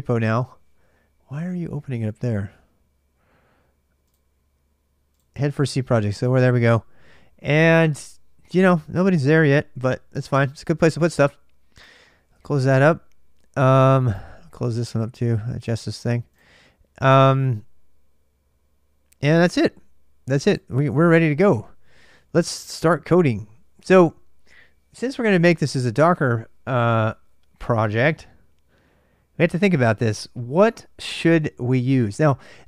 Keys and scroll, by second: 5.1 ctrl+[, 5.1 Return, 5.1 typing, 22.2-23.1 typing.